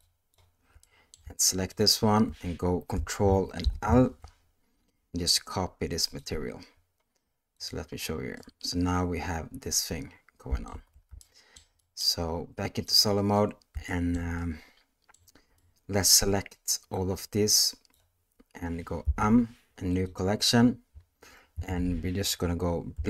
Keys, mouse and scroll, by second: 0.1 ctrl+click, 0.8 middle drag, 1.7 shift+click, 3.6 ctrl+l, 7.7 click, 8.4-10.7 middle drag, 10.7 alt+a, 11.2-12.0 shift+middle drag, 12.9 click, 13.9-15.1 shift+middle drag, 15.6-16.1 middle drag, 16.9-17.9 drag, 19.0 m.